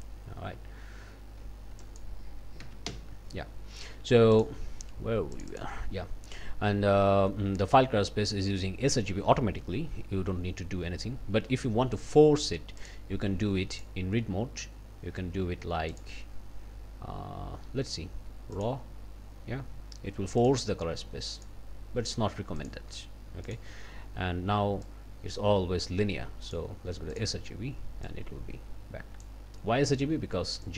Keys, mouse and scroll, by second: 0.0-1.0 scroll up 2, 1.1 scroll up 2, 1.8 click, 2.6 2, 2.9 Return, 4.3 click, 5.3 click, 12.8 click, 13.8 click, 15.9 click, 18.5 click, 20.4 click, 21.4 click, 22.6 click, 23.5 click, 24.8 click, 26.5 click, 27.1 click, 28.1-29.4 drag, 30.6 click.